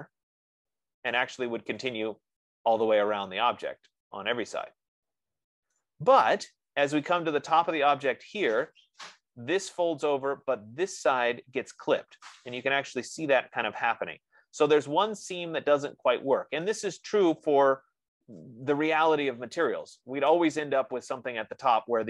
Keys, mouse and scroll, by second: 1.6 F15, 6.4-11.3 right drag, 14.0-14.8 scroll down 2, 14.8-15.8 scroll down 1, 15.8-16.8 scroll down 1, 16.8-17.7 scroll down 1, 17.7 right click, 17.7 scroll, 18.3-18.6 scroll.